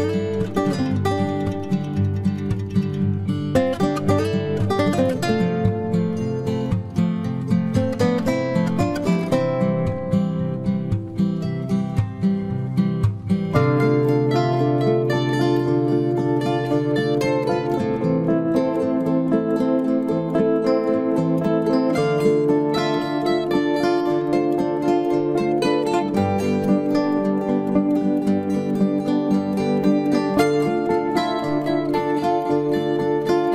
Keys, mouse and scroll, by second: 0.1 click, 5.3 ctrl+Tab, 6.4-8.1 drag, 6.9 c, 13.5-15.4 right drag, 14.4 c, 24.4-26.1 right drag, 26.1-27.5 middle drag, 26.2 c, 30.6-32.5 right drag, 32.5-33.5 middle drag, 32.8 c.